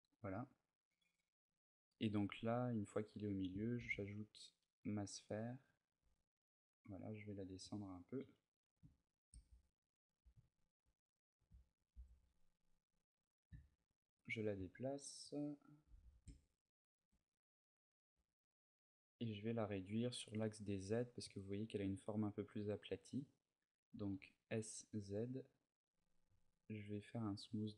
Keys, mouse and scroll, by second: 1.2 middle click, 3.6 shift+a, 7.2 click, 7.9 KP_3, 8.8 shift+middle click, 9.4 ctrl+middle click, 9.9 ctrl+middle click, 10.2 shift+middle click, 11.1 g, 13.7 shift+click, 15.5 g, 16.7 shift+click, 17.9 s, 18.8 click, 23.0 click, 23.7 s, 25.9 click, 26.1 t, 27.0 click, 27.4 t.